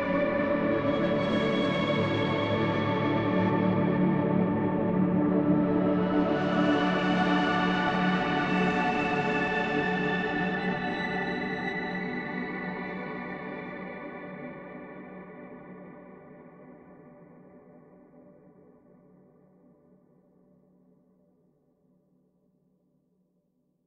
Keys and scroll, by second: 5.6 F3, 5.9 Escape, 12.8 shift+F2, 13.2 Escape, 17.2 F9.